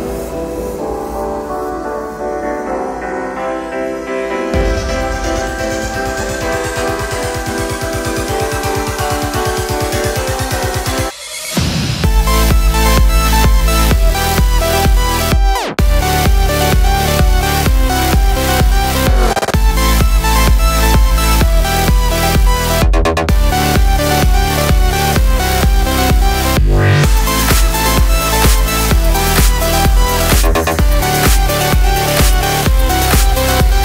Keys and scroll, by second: 15.5 space, 21.2 space.